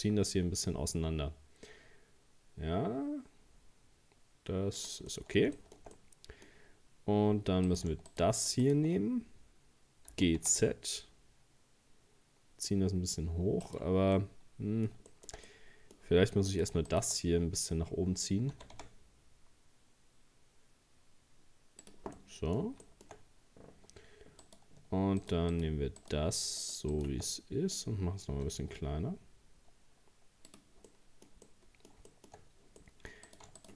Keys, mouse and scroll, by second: 5.1 middle click, 5.9-6.4 scroll up 1, 7.7 right click, 8.1 shift+right click, 8.4 shift+right click, 8.6 shift+right click, 10.1 g, 14.2-16.5 middle drag, 16.5 right click, 16.9 shift+right click, 17.5 scroll down 3, 18.5 g, 22.2-23.2 middle drag, 23.2 scroll up 1, 24.4 scroll up 1, 24.4 right click, 25.2 shift+right click, 25.5 shift+right click, 26.0 shift+right click, 26.6 shift+right click, 26.9 shift+right click, 27.3-28.4 middle drag, 28.4 s, 30.9-32.4 middle drag, 32.4-32.8 scroll up 1, 32.8 middle click, 33.3 right click, 33.6 shift+right click.